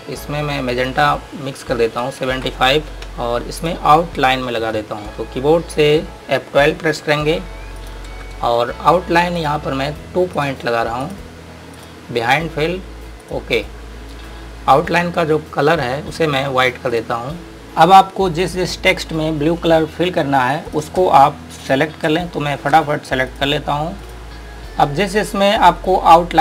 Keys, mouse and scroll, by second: 2.1 KP_7, 3.0 KP_Enter, 3.8 click, 5.0-6.7 scroll up 1, 6.7 F12, 8.0 click, 15.5-17.1 scroll down 1, 17.1 click, 17.6 scroll down 1, 17.8-20.1 scroll up 1, 20.9 click, 21.9 click, 22.7 scroll up 1, 23.6 click, 24.3 click, 24.5-25.4 scroll up 1, 25.4 click.